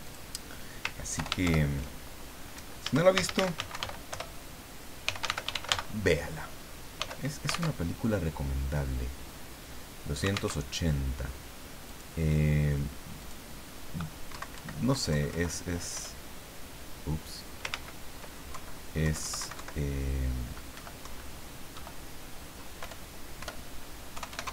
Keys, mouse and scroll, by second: 0.0 click, 1.1 ctrl+Home, 1.4 ctrl+shift+End, 2.9-6.9 typing, 7.7 alt+Tab, 10.6 alt+Tab, 11.8 click, 13.2 click, 14.3 Right, 14.9 Left, 15.9 BackSpace, 17.7 ctrl+z, 18.5 ctrl+Left, 19.4 ctrl+Right, 20.7 Delete, 21.0 Right, 21.7 Delete, 22.8 BackSpace, 24.1 KP_2, 24.3 KP_8, 24.4 KP_0.